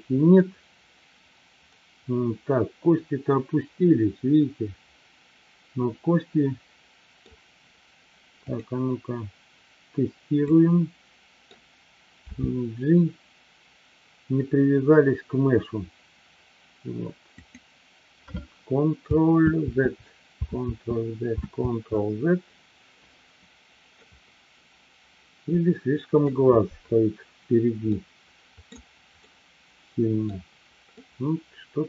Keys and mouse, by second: 0.4-7.4 middle drag, 8.5-10.0 drag, 10.4-11.5 middle drag, 17.8 click, 19.9 ctrl+z, 21.9 ctrl+z, 24.0-26.3 middle drag, 27.9-28.8 middle drag, 29.3-30.4 middle drag, 31.0-31.8 middle drag.